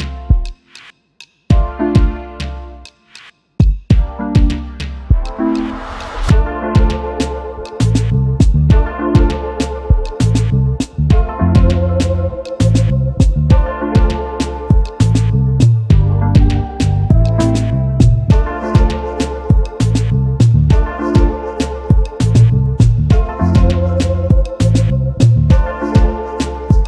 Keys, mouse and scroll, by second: 0.4 v, 1.2 double click, 1.4 alt+scroll up 1, 2.6 space, 2.6 double click, 3.0 space, 3.2-4.4 alt+scroll down 1, 5.2-5.6 alt+scroll down 1, 6.7 shift+click, 9.4 double click, 9.7 space, 11.0 alt+shift+click, 12.0 alt+scroll up 1, 12.4 space, 12.5 double click, 14.8 alt+shift+click, 19.8 alt+scroll down 1, 20.2 space, 20.3 double click, 21.1 alt+scroll down 1, 21.2 alt+scroll up 1, 24.7 double click, 25.2-25.5 alt+scroll up 1.